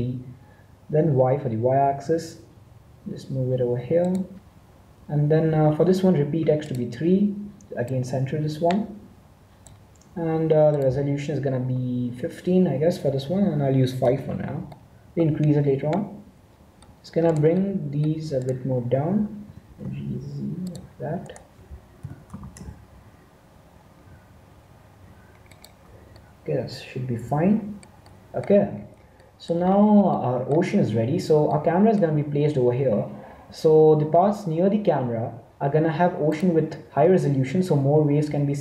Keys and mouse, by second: 6.6-9.5 drag, 10.7-12.5 drag, 14.7-16.6 middle drag, 17.2 middle click, 19.4 g, 21.9 g, 26.1-33.4 middle drag.